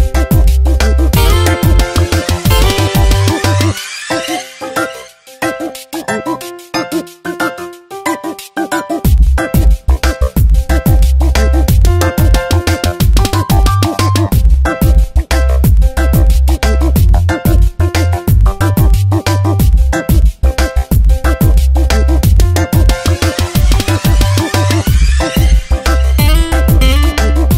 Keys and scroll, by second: 5.0 space, 7.4 space, 11.4 space, 15.3 space, 15.9 v, 23.0 Tab, 27.3 m.